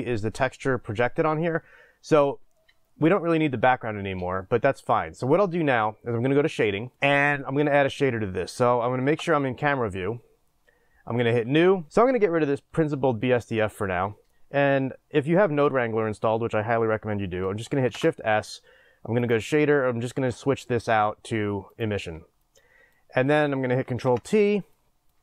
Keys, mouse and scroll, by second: 6.9 click, 9.1 KP_0, 11.3 click, 21.8 shift+s, 24.1 ctrl+t.